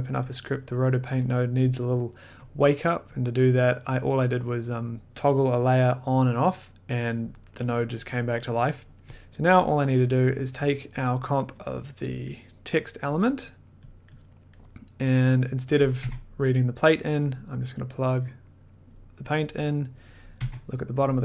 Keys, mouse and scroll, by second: 0.1 scroll, 0.6 click, 0.6 scroll, 1.3 click, 3.1 click, 3.3 click, 4.7 scroll, 4.7 click, 5.3 click, 6.0 click, 6.6 click, 9.0 middle click, 9.0 click, 9.0 1, 9.1 click, 9.2 middle click, 9.7 click, 9.8-10.1 scroll, 10.1 middle click, 10.9 click, 12.1 click, 12.4 middle click, 13.5 click, 13.9 click, 14.2 click, 14.3 middle click, 14.7 middle click, 15.2 middle click, 15.9 click, 16.0 1, 17.5 click, 18.9 click, 19.6 middle click, 20.2 click, 20.4 1, 21.0 scroll.